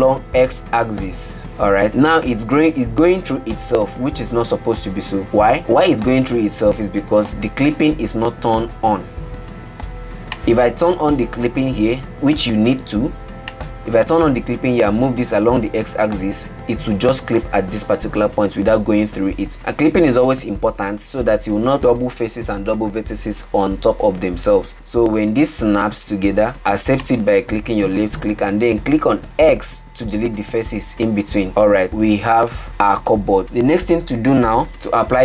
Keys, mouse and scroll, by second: 13.9 click, 15.7 g, 29.9 x, 31.9 scroll up 1, 33.0-33.4 middle drag.